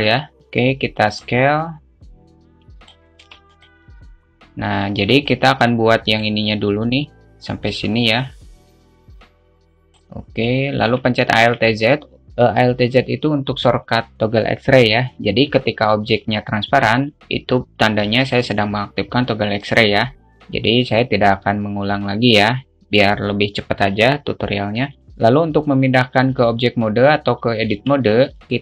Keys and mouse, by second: 0.8-1.9 drag, 2.1-3.3 drag, 5.7 click, 8.9 click, 10.1 click, 10.9-11.3 alt+shift+middle drag, 11.8 alt+z, 28.3 Tab.